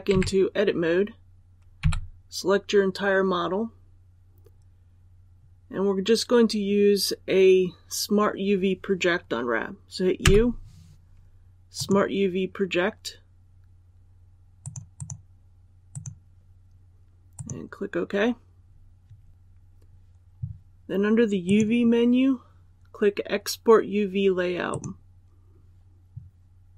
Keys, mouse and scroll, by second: 0.0 Tab, 1.7 a, 4.7-9.3 scroll up 1, 10.1 u, 11.6-26.7 drag.